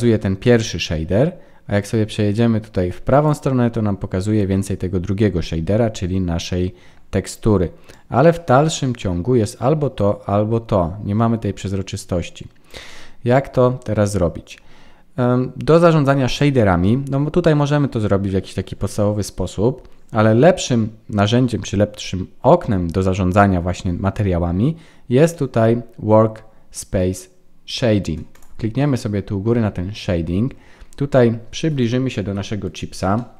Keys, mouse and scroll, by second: 1.8 click, 7.9 click.